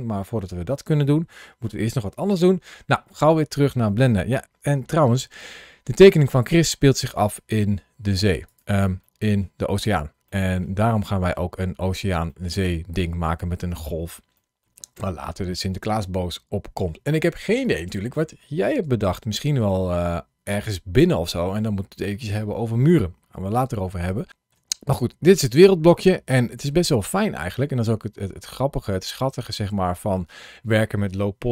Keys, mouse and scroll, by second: 5.0 scroll down 2, 5.8 scroll up 1, 6.4-7.1 scroll up 1, 7.5-7.8 scroll down 2, 7.8 scroll up 2, 8.3 click, 9.0 middle click, 9.6 click, 11.5-11.9 scroll up 1, 12.9-13.4 scroll up 2, 13.5 shift+middle click, 18.4-19.1 scroll down 1, 19.1 scroll up 1, 24.1 scroll down 1, 24.3 shift+middle click, 24.7 click, 25.8 middle click.